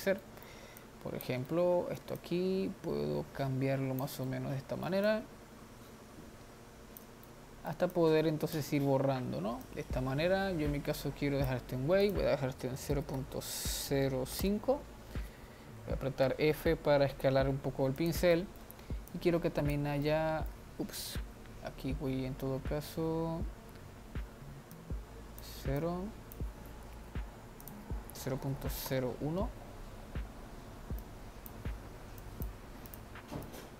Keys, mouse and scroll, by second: 0.0-0.4 scroll down 2, 0.4-2.7 middle drag, 2.7-4.4 drag, 4.4 middle click, 5.3-7.4 drag, 7.4 middle click, 8.4-15.2 drag, 16.4 f, 18.6 middle click, 19.3-20.3 drag, 20.3 middle click, 21.3 ctrl+z, 24.9-27.4 drag, 27.4 ctrl+z, 27.8-30.8 drag, 31.2-33.1 drag, 33.5-33.7 drag.